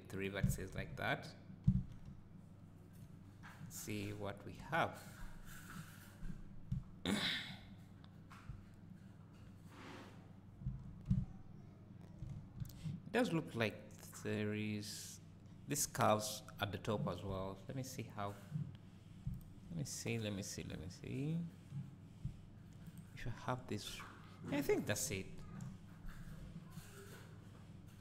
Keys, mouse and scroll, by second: 0.2 click, 1.8 Tab, 2.1 `, 3.2-4.6 scroll up 1, 4.6 KP_0, 6.4-6.7 scroll down 1, 6.7 `, 8.1-8.5 scroll down 1, 8.5 `, 10.7 Tab, 11.1 `, 12.6 alt+a, 18.9-19.2 scroll up 1, 19.9-22.2 scroll up 1, 22.8 click, 25.5 KP_0, 26.3 Tab, 26.5-28.0 scroll up 1.